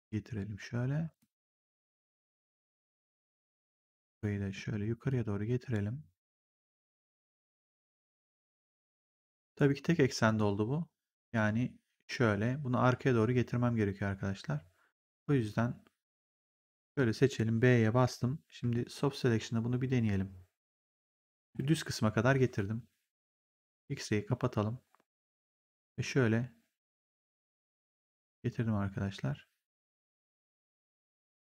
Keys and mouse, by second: 3.0 click, 5.0 click, 6.6 click, 9.5 right click, 10.2 click, 16.4 click, 17.9 b, 18.8 middle click, 21.3 b, 23.6 click, 25.5 click, 31.3 right click.